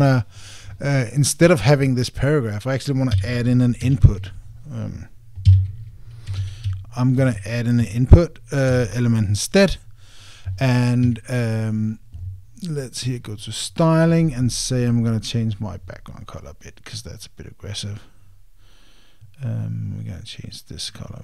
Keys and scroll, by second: 9.5 Return.